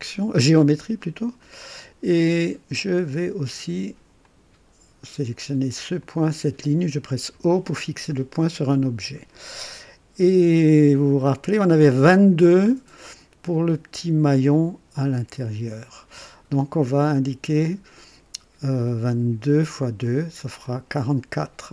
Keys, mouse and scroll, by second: 1.4 right click, 2.3 click, 4.2 click, 6.0 click, 7.3 o, 20.6 click.